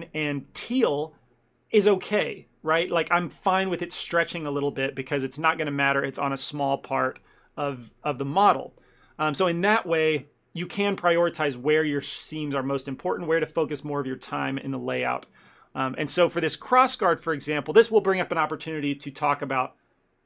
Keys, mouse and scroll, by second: 7.1 a, 7.2 a, 8.0 b, 9.0 a, 9.1 a, 15.7 ctrl+middle click, 16.1 middle click, 16.4 ctrl+middle click, 16.8 Tab, 17.0 scroll up 1, 17.4 middle click, 17.7 ctrl+middle click.